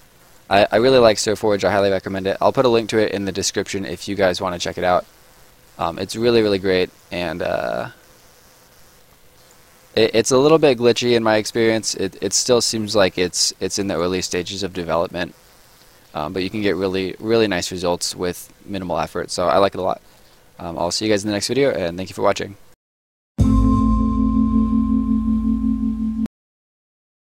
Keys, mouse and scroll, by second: 0.1 right click, 0.6 middle click, 1.0 right click, 1.5 middle click, 1.8 scroll up 1, 1.9 right click, 2.4 middle click, 3.1 right click, 3.7 middle click, 4.1-4.5 scroll up 1, 4.5 right click, 5.0 middle click, 5.6 right click, 6.1 middle click, 6.8 right click, 7.2 middle click, 8.0 right click, 8.5-9.1 scroll up 2, 8.6 middle click, 9.3 right click, 9.7 middle click, 10.1 scroll up 1, 10.4 right click, 10.8 middle click, 11.3 right click, 11.7 middle click, 12.1 right click, 13.0 middle click, 13.7 right click, 14.3 middle click, 15.2 right click, 15.7 middle click, 16.1 scroll up 1, 16.3 right click, 16.7 middle click, 17.8-18.4 scroll down 1, 20.4 middle click, 20.7 right click, 21.1 middle click, 21.6 right click.